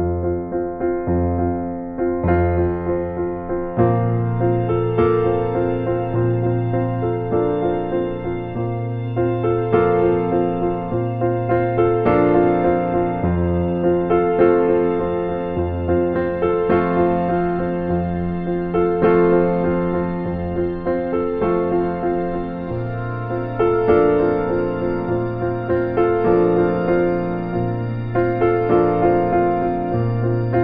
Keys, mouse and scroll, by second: 0.3 scroll down 1, 0.4 scroll up 1, 0.7-1.1 scroll down 1, 1.3 scroll up 1, 1.8-2.3 scroll down 1, 2.3 scroll up 1, 4.6 scroll down 1, 5.3 scroll down 1, 6.0 scroll down 1, 6.2-6.6 scroll up 1, 7.4-7.7 scroll down 2, 7.8 scroll up 1, 8.4-8.8 scroll down 1, 13.2 scroll down 1, 14.0 scroll up 1, 16.0 scroll down 1, 16.2-16.5 scroll up 1, 18.9 scroll down 1, 19.2-19.7 scroll up 1, 20.0 scroll up 1, 20.8-21.1 scroll down 1, 21.6 scroll up 1, 21.9-22.2 scroll down 1, 22.2-22.8 scroll up 1, 23.1-23.5 scroll up 1, 23.9 scroll down 1, 25.1 right click, 26.6 scroll down 1, 27.3-27.7 scroll up 1, 28.0-28.4 scroll down 1, 28.4-28.9 scroll up 1, 30.2 scroll up 1, 30.5-30.6 scroll down 1.